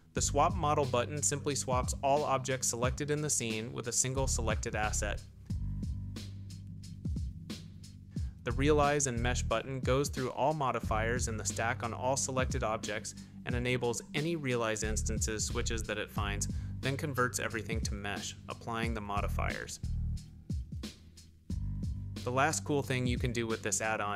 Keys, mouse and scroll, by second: 0.3-1.5 shift+drag, 2.5 click, 3.3 click, 4.0-4.7 drag, 5.2 shift+click, 6.4 click, 7.1 click, 7.9 click, 11.2-12.1 drag, 12.5-14.2 drag, 16.5 ctrl+z, 18.0 click, 19.3 Tab, 21.0 Tab, 23.5 click, 23.8-24.1 middle drag.